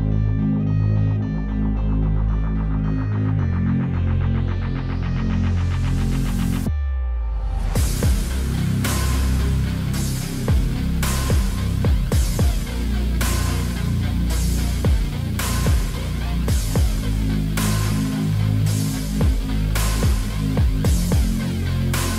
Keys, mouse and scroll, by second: 0.0 alt+middle click, 0.1 alt+click, 0.2 alt+middle click, 0.3 scroll down 1, 0.4 scroll up 1, 0.5 alt+click, 0.7 alt+middle click, 1.3-2.5 scroll down 1, 3.7 alt+middle click, 5.2 scroll up 1, 5.4 alt+click, 6.6 alt+click, 6.8 alt+middle click, 6.9 alt+click, 7.0 scroll up 1, 7.1 alt+middle click, 7.3 alt+click, 7.7 scroll down 4, 7.9 scroll up 1, 8.1 alt+click, 8.2 alt+middle click, 8.9 scroll up 1, 9.1 alt+click, 9.3 alt+middle click, 10.9 double click, 12.1 double click, 12.7 scroll up 1, 12.8 alt+click, 12.9 alt+middle click, 13.0 scroll down 1, 13.1 alt+click, 13.3 scroll up 2, 13.5 alt+middle click, 13.7 alt+middle click, 14.1 alt+click, 14.2 alt+middle click, 14.3 scroll up 1, 14.4 alt+middle click, 14.5-14.9 scroll down 2, 14.7 alt+middle click, 15.0 right click, 16.0-17.1 scroll down 1, 17.8-18.4 scroll up 2, 18.2 alt+middle click, 18.4 alt+click, 18.5 alt+middle click, 18.7 alt+click, 18.9 alt+middle click, 19.0 alt+click, 20.0 alt+middle click, 20.0 alt+click, 21.1 double click.